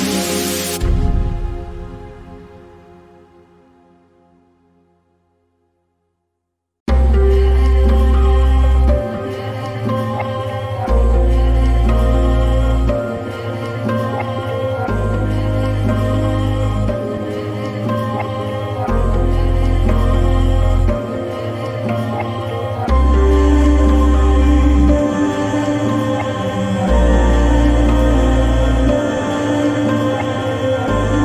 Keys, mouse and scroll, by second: 3.0 Down, 6.6 click, 11.4 click, 14.3-17.3 drag, 20.4 click, 20.4 click, 22.8-25.2 drag, 27.7 click.